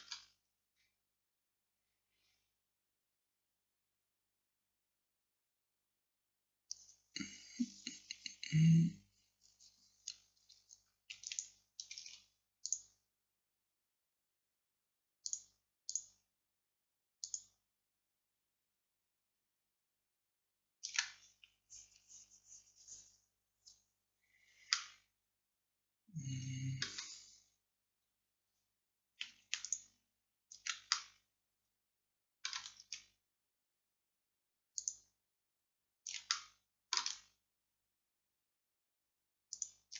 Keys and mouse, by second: 11.3-24.8 right drag, 24.8-29.7 drag, 29.7-31.4 right drag, 31.4-34.9 middle drag, 34.9-36.4 right drag, 36.4 click, 36.5-39.9 middle drag.